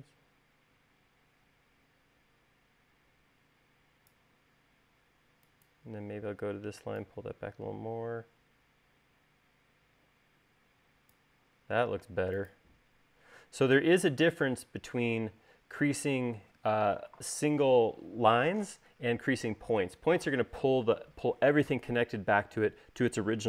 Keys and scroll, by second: 12.8 space.